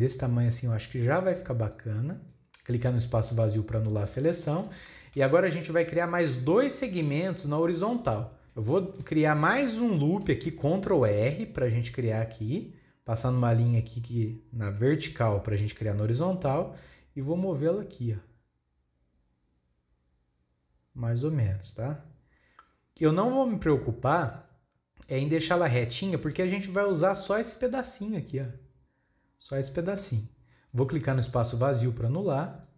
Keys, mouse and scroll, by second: 2.2-2.9 scroll down 1, 4.1 click, 4.9-7.9 shift+middle drag, 8.4-10.3 shift+scroll up 1, 26.6-27.2 scroll up 5, 27.2-30.1 shift+middle drag, 30.1-30.7 scroll down 1, 30.7-32.4 scroll down 3, 32.4-32.7 drag.